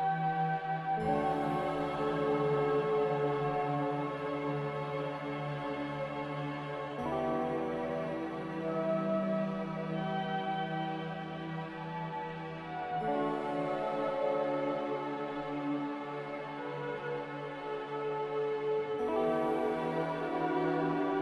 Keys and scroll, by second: 14.0 z, 20.5 a.